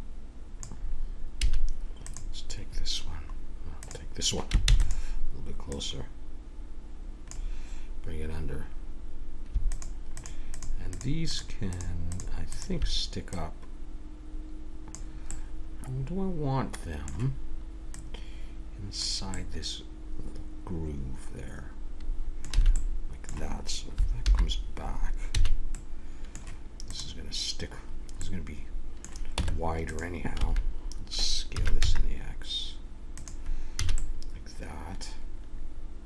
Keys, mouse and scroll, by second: 1.4 a, 2.0-3.8 drag, 4.6-7.9 drag, 4.6 shift+d, 9.7-15.3 drag, 15.3-16.4 middle drag, 16.6 middle click, 17.9-19.7 drag, 19.3 middle click, 21.2-22.7 middle drag, 22.6 a, 24.2 alt+h, 25.3 a, 26.9 right click, 27.5 click, 28.2 middle click, 29.3 Tab, 30.3 a, 31.5 s, 33.7 a, 34.8-36.0 middle drag.